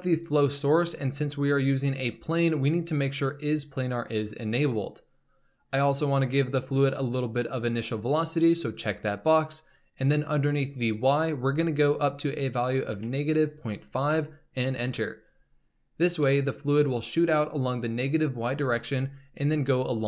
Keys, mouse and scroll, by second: 3.3 click, 6.2 click, 10.7-13.9 drag, 16.2-20.0 middle drag.